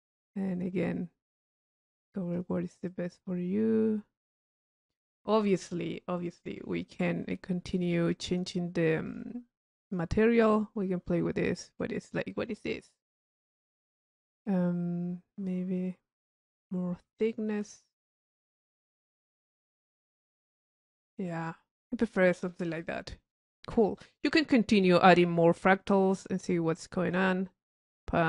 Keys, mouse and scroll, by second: 0.2-2.5 drag, 8.3 click, 9.2 click, 9.9 click, 10.8-17.9 drag, 19.4 click, 22.3 click, 24.0 click, 25.3 click, 26.5-27.5 drag, 28.0-28.2 drag.